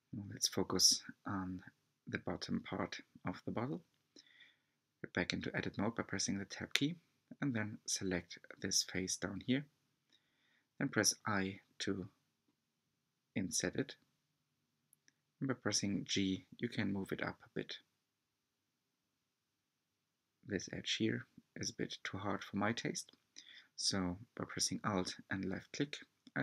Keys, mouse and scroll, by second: 0.7-1.1 scroll up 2, 1.1-3.1 shift+middle drag, 4.5 Tab, 5.5 3, 5.7 click, 11.5 g, 15.4 click, 16.1-16.5 scroll up 3, 16.5 shift+middle click, 17.2-18.1 scroll up 2, 18.1 2, 18.8 alt+click, 20.8 b, 23.2-24.3 middle drag, 24.3-25.1 scroll down 1, 25.1 3, 25.2 click.